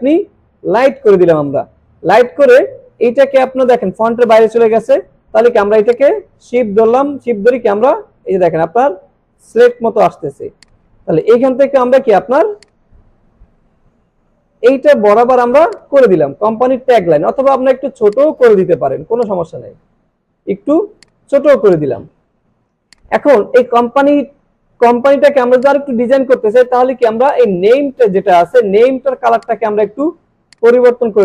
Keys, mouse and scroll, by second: 0.8 click, 2.4 alt+scroll up 1, 5.8 shift+Num_Lock, 5.8 alt+scroll up 1, 5.9-9.4 shift+drag, 9.7 space, 10.0 click, 10.4 space, 10.6 click, 10.8 space, 12.6-14.8 shift+drag, 15.2 alt+scroll down 1, 15.5 space, 15.7 click, 16.2 alt+scroll down 1, 16.9 click, 17.3 alt+scroll up 1, 18.1 click, 19.2-20.5 shift+drag, 21.0 click, 21.5 alt+scroll down 1, 21.7 space, 21.8-22.4 click, 22.6 alt+scroll up 1, 22.8 space, 23.0 click, 25.1 alt+scroll up 1, 25.3 alt+scroll down 1, 25.7-26.2 click, 26.3 alt+scroll up 1, 27.0-28.3 drag.